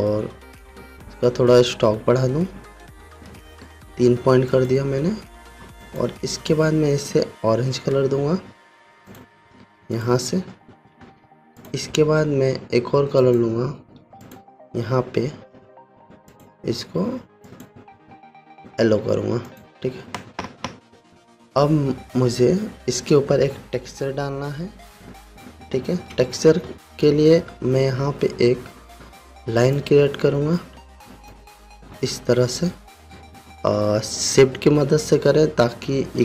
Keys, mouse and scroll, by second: 5.1 click, 9.7 click, 11.6 v, 12.1 click, 19.4 v, 20.0 click, 27.5-28.0 alt+scroll down 1, 28.3-30.1 scroll down 1, 30.2-36.2 drag, 32.1-36.2 drag.